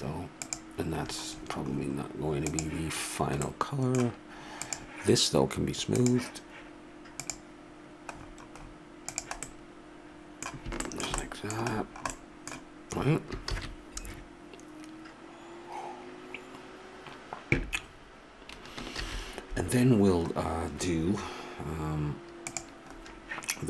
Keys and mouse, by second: 4.6 click, 9.1 middle click, 9.6-13.9 middle drag, 13.9 shift+z, 18.6 middle click, 19.3 shift+z, 22.5 click, 23.0 middle click.